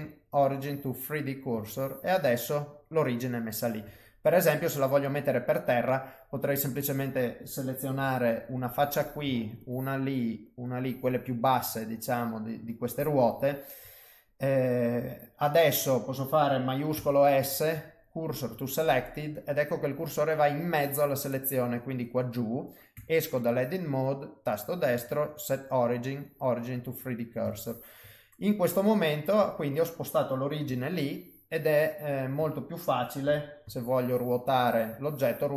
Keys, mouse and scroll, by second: 1.0 middle click, 1.7 ctrl+middle click, 2.3 middle click, 3.8 Tab, 4.2 middle click, 5.5 middle click, 6.7 click, 7.9 3, 8.5 click, 9.6 shift+click, 10.6 click, 11.6 shift+click, 12.8 shift+click, 16.9 shift+s, 18.9 middle click, 20.1 middle click, 21.2 middle click, 22.9 Tab, 24.2 right click, 26.9 middle click, 30.6 g, 33.2 r.